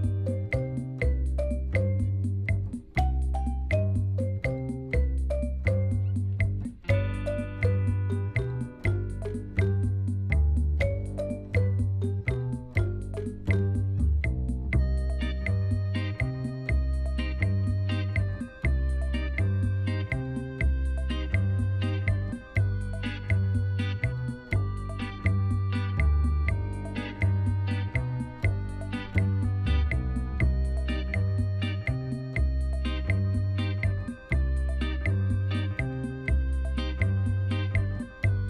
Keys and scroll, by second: 0.6 g, 0.9 z, 5.6 Tab, 15.5 ctrl+r, 18.1 Return, 33.2 3, 34.6 shift+s, 36.6 Tab, 37.2 shift+a.